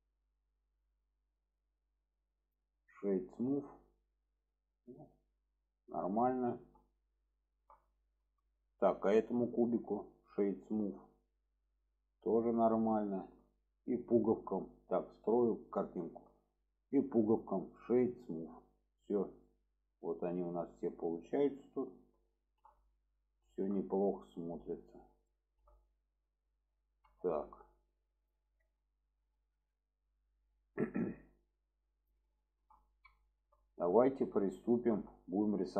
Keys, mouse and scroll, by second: 1.0-1.6 middle drag, 2.4-3.5 right drag, 3.9-5.2 middle drag, 6.4 shift+middle drag, 7.4 shift+middle drag, 8.4 middle drag, 10.2-11.5 right drag, 11.8-12.6 middle drag, 13.0 shift+middle drag, 14.1 shift+middle click, 15.5 click, 16.0 shift+middle drag, 17.7 right click, 19.4-20.0 middle drag, 20.5-21.5 middle drag, 22.3 shift+middle drag, 23.4 shift+middle drag, 23.8-24.2 middle drag, 25.3-25.6 shift+middle drag, 25.8-26.9 middle drag, 27.2 shift+middle click, 28.2 click, 29.0 shift+middle drag, 32.0 click, 32.4 shift+middle click, 33.2 shift+middle drag, 34.0 shift+middle drag, 34.8 shift+middle click.